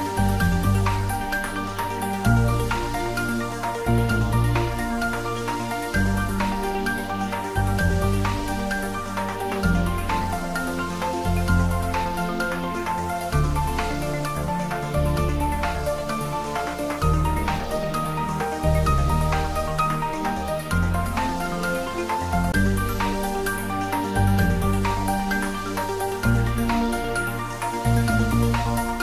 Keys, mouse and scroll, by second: 0.3 scroll down 1, 1.0 click, 1.2 middle click, 1.6 ctrl+z, 2.7 click, 3.2-3.6 scroll up 1, 4.3 ctrl+r, 4.9-5.9 scroll up 1, 6.2 click, 6.9-8.0 typing, 10.6 click, 11.6 ctrl+z, 12.2 ctrl+t, 12.7 scroll up 1, 13.4 scroll down 1, 14.3 ctrl+r, 15.8-16.2 scroll up 1, 16.2 click, 17.0 s, 17.4 y, 20.4 click, 21.9 middle click, 22.8 scroll up 1, 23.4 click, 24.0 scroll up 1, 26.3-28.2 middle drag, 28.2 click.